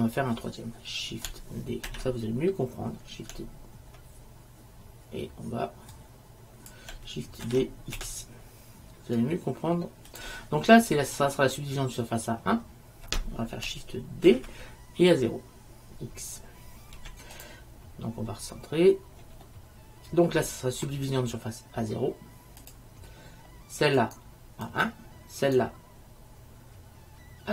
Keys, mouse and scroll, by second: 2.0 shift+d, 6.1-6.8 drag, 7.6 shift+d, 14.4 shift+d, 19.6 middle click, 20.3-22.0 middle drag, 22.7-24.9 drag, 24.1-27.5 right drag.